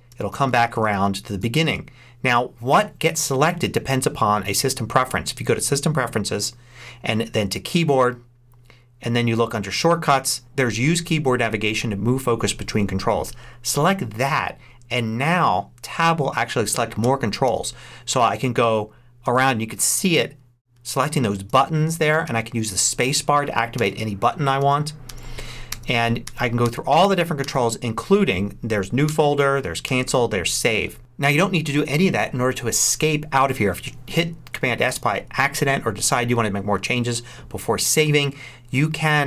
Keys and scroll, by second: 16.9 Tab, 20.1 Tab, 20.6 Tab, 29.0 Tab.